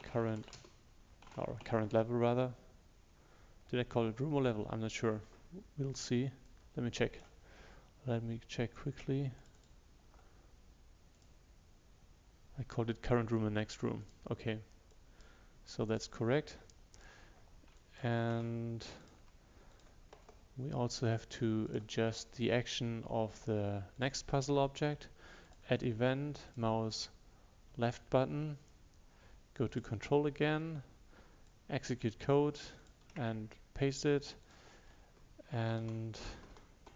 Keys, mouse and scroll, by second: 0.0-0.4 typing, 6.5-12.3 drag, 19.1 click, 34.5 click, 35.9 ctrl+Left.